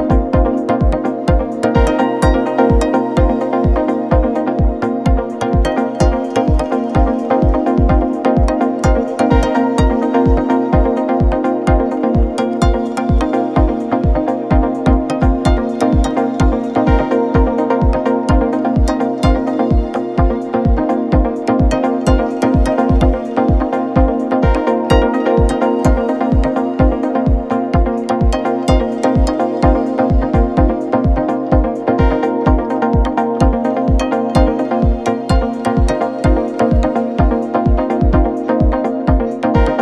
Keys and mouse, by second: 3.9 shift+a, 6.8 x, 7.2 shift+a, 9.3 KP_7, 9.9 r, 11.8 s, 13.1 r, 15.0-16.4 drag, 16.1 s, 16.4-19.8 middle drag, 16.9 s, 18.3 s, 19.2 s, 19.8 click, 20.7 middle click, 21.5-31.9 drag, 31.9-38.8 middle drag, 36.5 shift+a, 38.2 s, 38.8-39.8 drag, 39.6 KP_7.